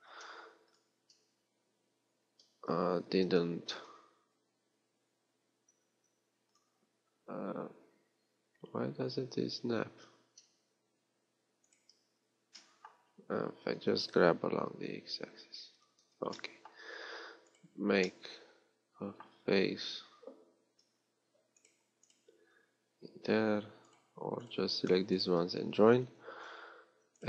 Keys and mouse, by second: 0.1 ctrl+shift+Tab, 3.2 ctrl+e, 12.7-15.9 right drag, 14.0 g, 17.1-18.2 right drag, 18.4 middle click, 26.5 j.